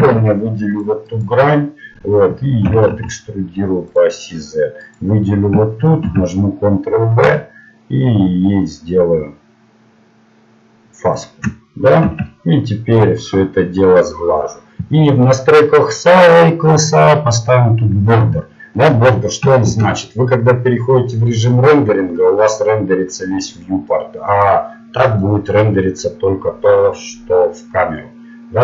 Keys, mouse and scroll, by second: 0.0 ctrl+Tab, 2.7 e, 4.9-6.5 right drag, 6.0 ctrl+b, 12.1 Tab, 13.3-16.8 drag, 19.7 shift+z, 25.2-26.9 drag, 26.9 middle click, 27.7 middle click.